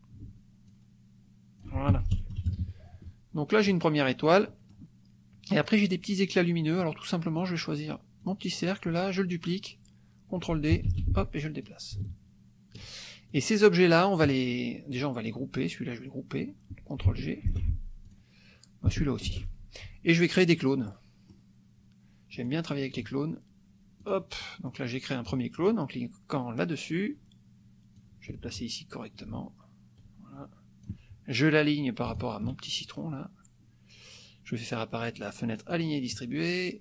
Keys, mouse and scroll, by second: 0.7-1.8 ctrl+shift+drag, 1.9 ctrl+shift+F1, 2.1 ctrl+shift+-, 3.4 middle click, 4.5 middle click, 5.5 click, 6.9 click, 7.5 click, 8.2 click, 10.9 ctrl+d, 11.6-13.0 drag, 13.3 click, 14.0 click, 15.6-16.6 drag, 17.5 ctrl+g, 18.0 ctrl+click, 19.3 ctrl+g, 20.9 click, 22.4 click, 24.1 click, 24.5 click, 27.9-31.0 drag, 32.1 shift+click, 35.5 click.